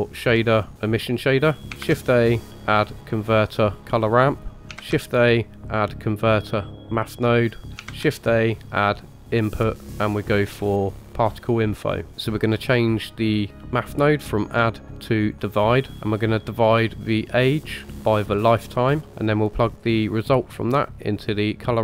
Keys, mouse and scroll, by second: 1.8 shift+a, 4.8 shift+a, 7.9 shift+a, 12.1 ctrl+z, 14.3-15.4 drag, 17.2-17.9 drag, 18.3-19.0 drag, 20.3-21.6 drag.